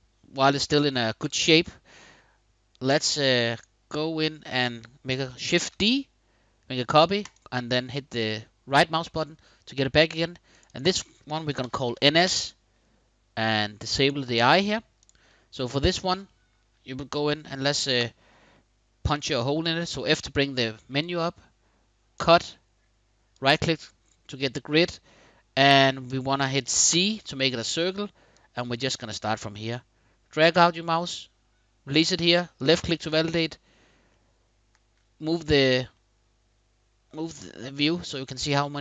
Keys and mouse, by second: 2.6 click, 5.3 shift+d, 6.9 click, 10.2 click, 10.4-11.7 drag, 11.7 middle click, 13.7 middle click, 16.0-16.4 shift+middle drag, 17.6 f, 23.1 click, 23.1 right click, 26.7 c, 28.1-31.7 drag, 32.3 shift+click, 33.8-34.8 shift+drag, 35.7-37.7 drag.